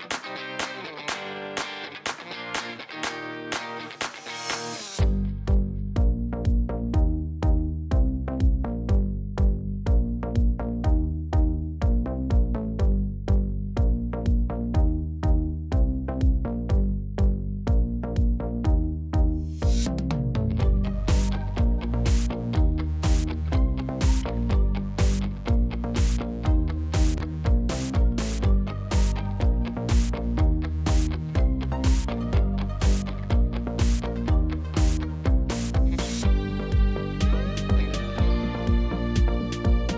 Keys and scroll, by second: 0.1-1.7 typing, 3.2 g, 3.3 z, 4.1 0, 5.5 n, 15.9 0, 17.7 7, 18.0 shift+d, 19.3 0, 19.5 space, 23.4 space, 25.9 Left, 26.1-26.8 typing, 32.2 5, 32.4 1, 32.7 2, 33.1 Return, 37.6-39.9 typing.